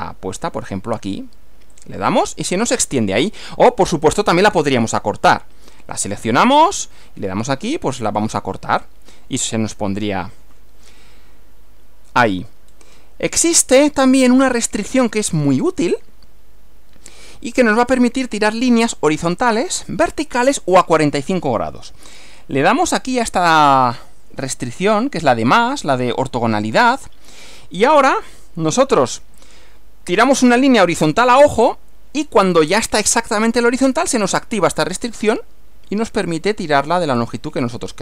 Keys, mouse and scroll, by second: 1.8 click, 3.2 click, 4.8 click, 6.5 click, 8.1 click, 12.3 scroll down 2, 12.7 scroll up 2, 17.1 click, 26.2 click, 29.4 click.